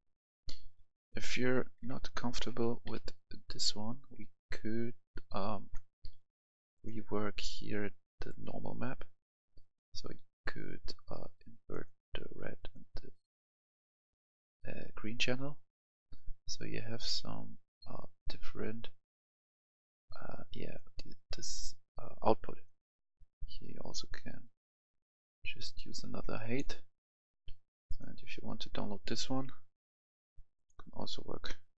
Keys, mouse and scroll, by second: 1.1 w, 1.7 w, 2.3 s, 2.8 w, 5.4 s, 6.7 click, 10.6 scroll up 1, 11.6-26.9 drag, 26.9 scroll down 1, 27.8 click.